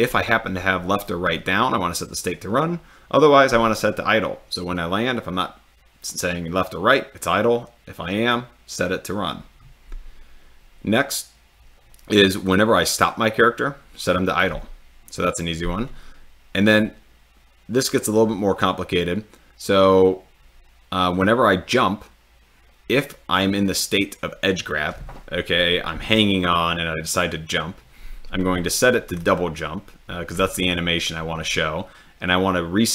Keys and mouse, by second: 12.4 click.